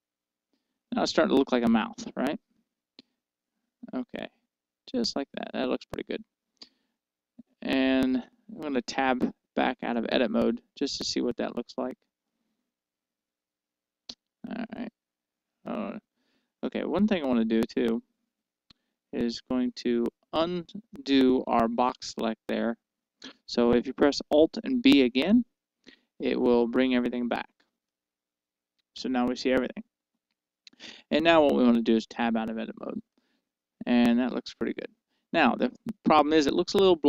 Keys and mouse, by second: 2.3-4.1 middle drag, 10.0 Tab, 11.0-13.6 middle drag, 15.1 Tab, 15.7-19.9 middle drag, 21.0-24.2 middle drag, 25.3 alt+b, 28.2-32.5 middle drag, 32.5 Tab, 33.5-35.5 middle drag.